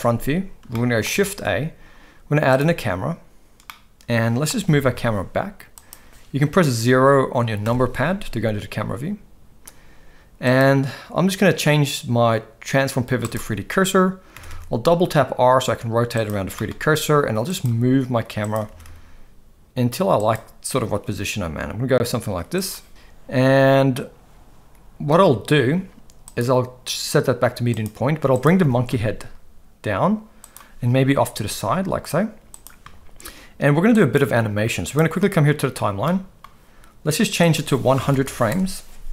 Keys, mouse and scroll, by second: 0.7-1.0 shift+middle drag, 1.2 shift+a, 3.6-4.5 middle drag, 4.6 g, 7.6 KP_0, 10.5-13.3 drag, 14.3 r, 16.5 g, 17.7 g, 18.7 r, 21.0 g, 26.4-27.8 drag, 28.6 g, 31.3 g, 33.9-35.0 drag, 36.0-36.4 middle drag, 37.4-38.5 drag, 38.2 0.